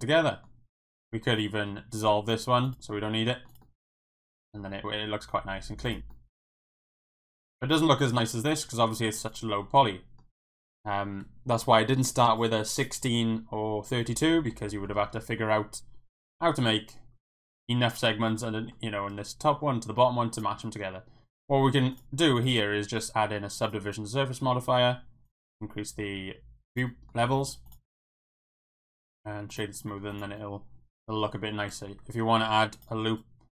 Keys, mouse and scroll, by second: 0.3 Tab, 0.3 middle click, 1.3 alt+click, 1.7 x, 2.9 Tab, 3.1-3.5 middle drag, 3.5 click, 3.6-5.6 middle drag, 5.8 click, 6.1 middle click, 6.8-7.3 middle drag, 8.9 middle drag, 9.3 click, 9.5-10.2 middle drag, 14.3 middle drag, 14.7 middle click, 18.3-18.7 middle drag, 20.0 middle drag, 21.9 click, 22.4-23.7 drag, 25.2 click, 25.4 click, 26.9 middle drag, 27.4 middle click, 28.2 middle drag, 28.8-29.6 right drag, 29.9 middle click, 30.1 click, 30.4-31.2 middle drag, 31.3 middle click, 31.6 Tab, 31.7 middle click, 32.4 ctrl+r.